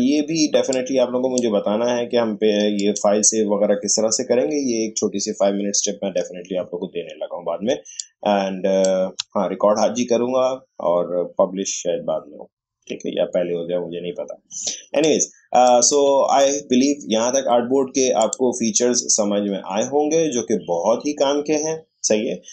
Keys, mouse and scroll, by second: 0.7-2.8 drag, 7.7 space, 8.0 click, 8.1 space, 14.6 space, 15.0 click, 15.1 space, 18.1 click, 18.2 click.